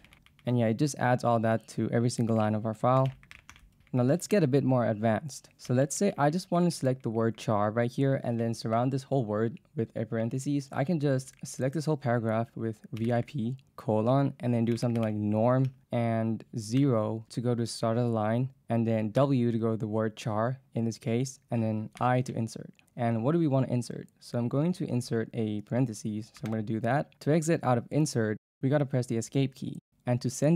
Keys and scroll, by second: 0.0-4.3 typing, 5.7 k, 6.6 b, 10.7 j, 11.3 k, 12.8-15.7 typing, 16.8 0, 19.2 w, 22.0 i, 26.5 shift+9.